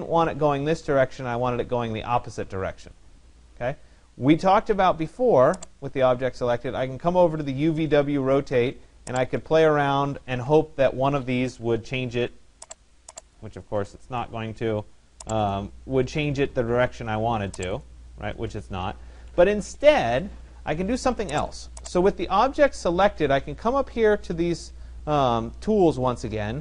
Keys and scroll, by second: 9.6 9, 10.3 0, 11.6 Tab, 13.7 0, 14.0 Tab, 15.6-16.5 typing, 18.3 0, 19.1 Tab.